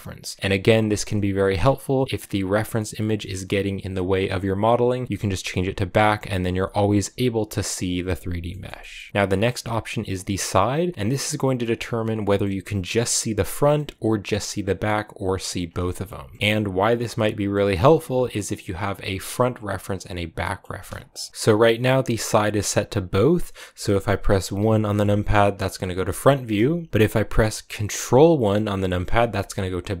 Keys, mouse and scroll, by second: 2.0-6.0 middle drag, 6.0 right click, 6.5 s, 7.0 g, 8.4-10.9 shift+middle drag, 12.3-15.5 middle drag, 15.5 scroll down 1, 15.7-21.3 shift+middle drag, 21.3-22.5 scroll up 1, 22.5-22.9 scroll up 1, 22.9-26.1 drag, 26.1-28.7 shift+middle drag, 28.7 ctrl+KP_1.